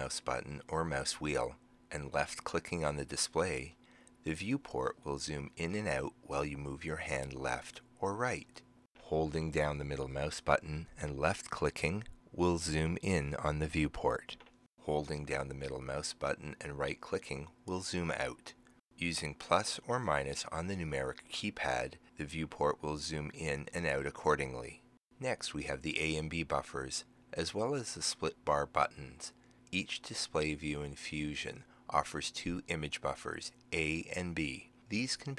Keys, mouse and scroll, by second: 0.0-8.8 middle drag, 1.5-8.8 drag, 9.3 middle click, 9.5-14.6 middle drag, 11.2 click, 15.2-18.4 middle drag, 16.8 right click, 18.9 Num_Lock.